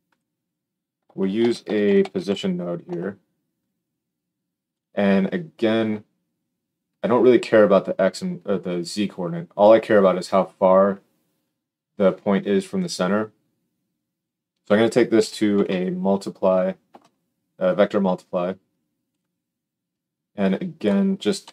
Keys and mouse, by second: 0.2-14.2 middle drag, 1.3 shift+a, 14.2-19.1 drag, 19.1-20.3 middle drag, 20.3-21.5 drag.